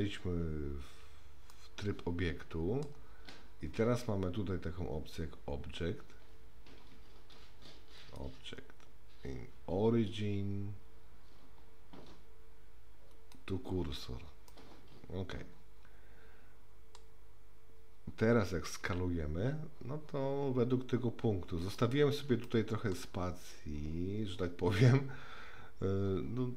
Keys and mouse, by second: 1.5-2.8 middle drag, 8.0-13.3 drag, 14.5-17.0 middle drag, 18.8 s, 22.4-22.9 shift+middle drag.